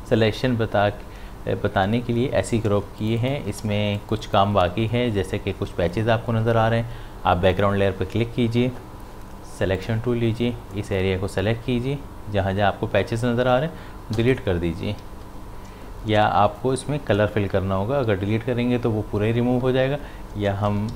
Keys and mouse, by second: 2.7 space, 3.0 ctrl+click, 3.7 space, 4.0 click, 4.2 space, 7.5 click, 9.8-15.1 drag, 15.1 ctrl+z, 20.6 ctrl+z, 20.7-20.9 typing.